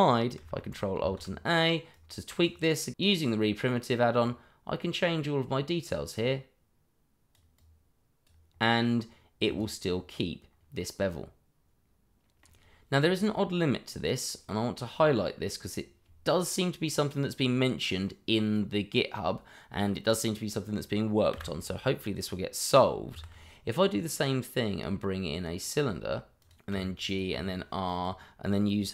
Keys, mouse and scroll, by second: 1.6 ctrl+alt+a, 1.9 click, 4.2 click, 9.8-10.9 scroll down 1, 11.0 middle click, 21.3 Delete, 23.1 shift+a, 26.4 click, 26.7 g, 27.0 click, 27.3 r, 27.8 click.